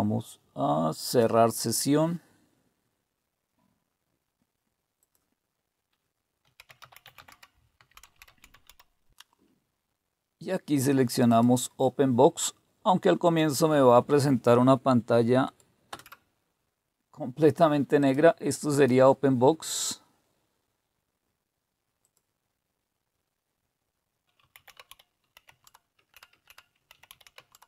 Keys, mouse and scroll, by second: 1.0 click, 5.0 click, 6.2-9.3 typing, 11.3 click, 13.2 click, 15.4 click, 15.9 Return, 18.0 click, 18.7-20.4 drag, 22.0 click, 24.1-27.6 typing.